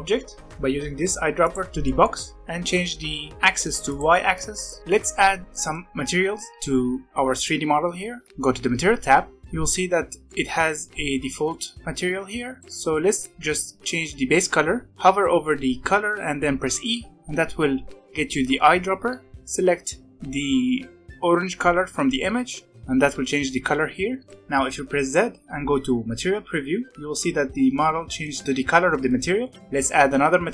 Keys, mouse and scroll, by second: 1.8-3.8 middle drag, 3.8 click, 4.5 click, 4.8-7.3 middle drag, 8.2 click, 9.3 middle click, 12.6-14.9 middle drag, 17.1 e, 24.2-25.1 middle drag, 25.1 z, 26.9-29.5 middle drag, 29.5 alt+a.